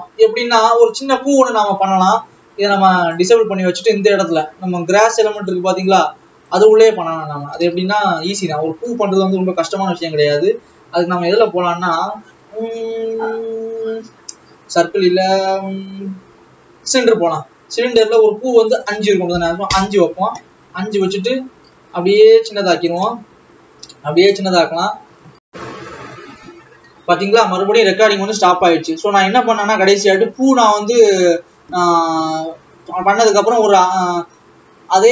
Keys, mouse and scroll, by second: 1.4 click, 2.9 click, 5.8 click, 6.4 click, 19.7-21.5 drag, 21.5 s, 23.7 s, 24.4-25.1 scroll up 12, 28.3-30.4 drag, 31.4-32.6 scroll up 11.